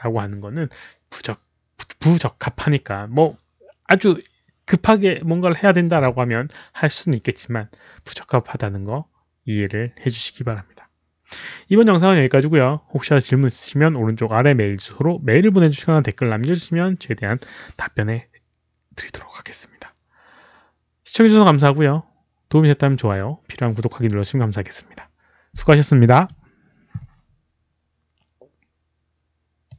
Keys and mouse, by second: 29.6 click.